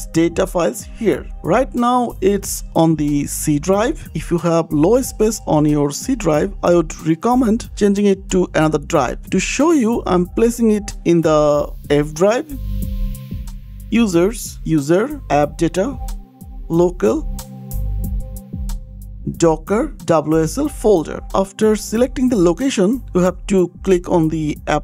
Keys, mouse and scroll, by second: 7.0 click, 8.7 click, 10.0 scroll down 1, 10.2-11.1 scroll, 11.1-12.2 scroll, 12.2 click, 13.3 click, 13.6 u, 13.9 u, 14.2 click, 14.8 click, 14.9 click, 15.8 click, 16.0 click, 16.9 click, 17.0 click, 17.2 click, 18.2 click, 18.9 click, 19.3-21.5 typing, 19.9 click, 20.6 click, 21.6 click, 21.8 click, 22.2 ctrl+c, 22.2 click.